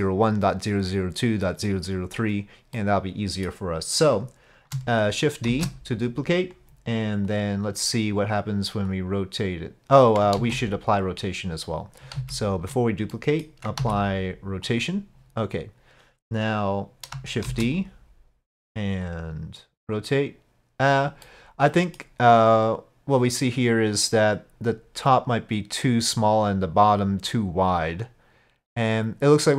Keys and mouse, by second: 2.8 middle click, 5.5 shift+d, 7.4 click, 9.0-10.3 drag, 10.4 ctrl+z, 12.2 ctrl+z, 13.1-13.5 middle drag, 13.8 ctrl+a, 17.5 shift+d, 19.1-21.0 drag, 21.3-22.0 middle drag, 28.0 click.